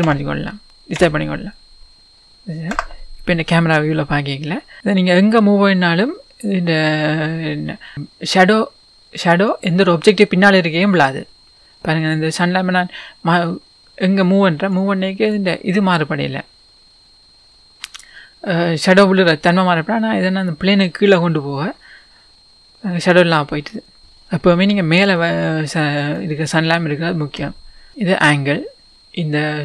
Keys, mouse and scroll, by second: 0.0 KP_1, 2.1 scroll down 1, 2.3 click, 2.7 KP_0, 3.9 middle click, 3.9-4.4 scroll up 2, 4.4 scroll up 1, 4.8 click, 4.9-7.9 middle drag, 4.9 click, 12.6 click, 20.6 click, 22.3-25.2 middle drag, 24.0 click, 24.4-25.2 scroll down 1, 25.2 click, 27.9-29.6 drag.